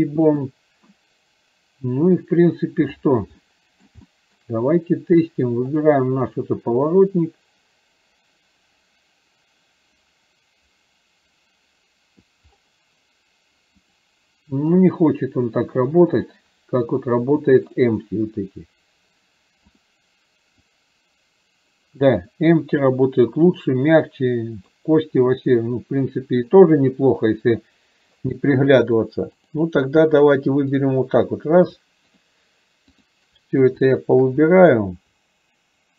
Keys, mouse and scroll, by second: 3.4-4.0 middle drag, 4.1-4.5 shift+middle drag, 7.0-12.3 drag, 13.9 click, 17.8 click, 19.8 click, 20.9-24.8 drag, 29.0 click, 32.3 shift+click.